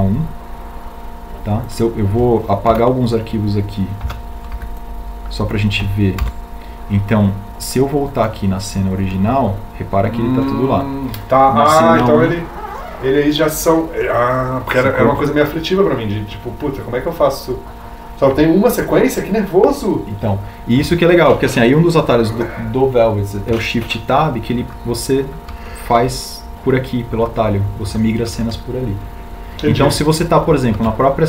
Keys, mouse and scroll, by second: 6.8 b, 8.5 Delete, 27.7 shift+Tab.